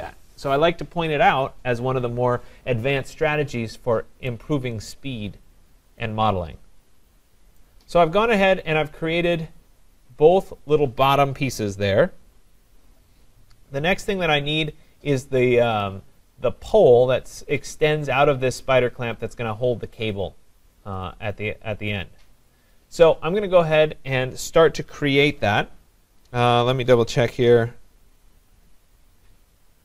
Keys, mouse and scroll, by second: 3.7-4.3 scroll down 3, 4.3-5.4 scroll down 1, 5.4 middle click, 7.6 right click, 9.8 right click.